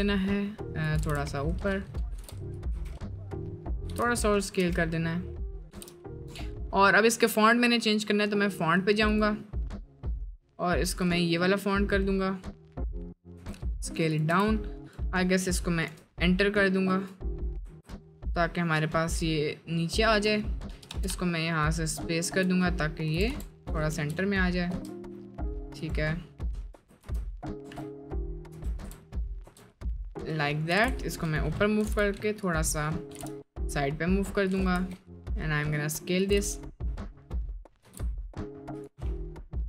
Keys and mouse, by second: 1.0 g, 2.1 g, 2.7 s, 3.9 g, 4.6 s, 5.7 g, 13.4 s, 14.3 Tab, 15.8 Return, 17.6 Return, 17.6 BackSpace, 20.7-23.1 space, 23.1 BackSpace, 23.9 Tab, 23.9 BackSpace, 24.6 Tab, 26.7 Return, 27.6 Tab, 27.6 Return, 28.5 Tab, 28.8 BackSpace, 29.4 Tab, 30.7 g, 31.8 g, 33.1 g, 34.8 s, 36.3 g, 37.8 g, 39.1-39.5 middle drag.